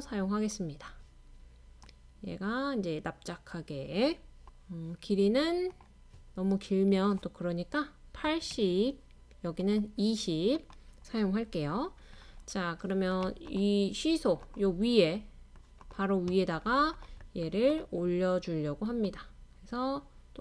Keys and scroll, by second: 8.3 typing.